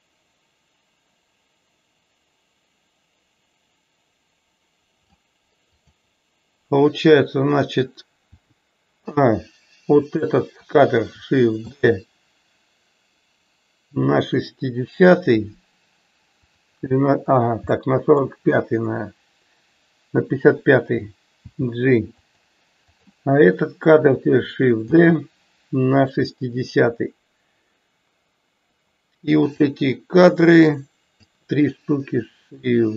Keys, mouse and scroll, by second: 5.9 click, 10.1 click, 17.9 middle click, 29.6 click, 30.0-31.2 drag.